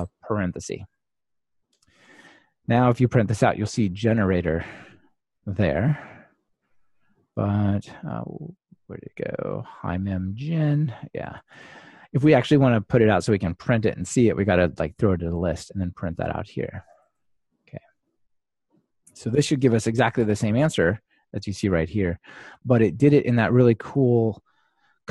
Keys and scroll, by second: 17.0 Delete, 19.6 ctrl+r.